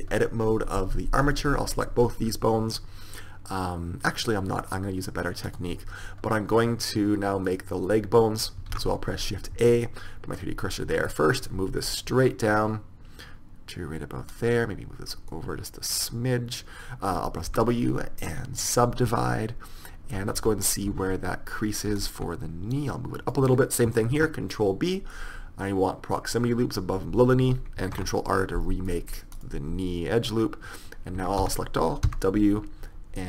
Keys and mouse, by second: 1.4-3.8 right drag, 5.6-7.5 right drag, 7.6-8.8 drag, 8.8 right click, 8.8 shift+a, 8.9 click, 11.6-13.5 drag, 14.4 right click, 15.4 middle click, 17.6 w, 20.5 Tab, 20.8 right click, 21.0 Tab, 24.3 ctrl+b, 28.1 ctrl+r, 31.3 a, 31.5 a, 32.2 w.